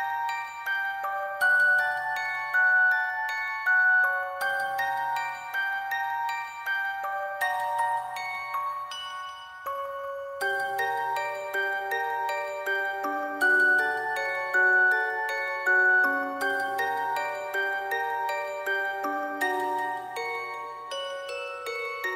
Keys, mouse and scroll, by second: 1.0 alt+click, 1.2 alt+click, 2.0 ctrl+click, 2.5 alt+click, 2.9 alt+click, 4.0 shift+click, 4.2 alt+click, 7.9 ctrl+v, 8.2 Delete, 8.3 right click, 8.6 double click, 8.9 right click, 9.4 Delete, 11.5 ctrl+e, 13.3 ctrl+e, 14.7 Delete, 15.6 scroll down 1, 18.0 [, 19.2 typing, 21.2 double click, 21.8 double click.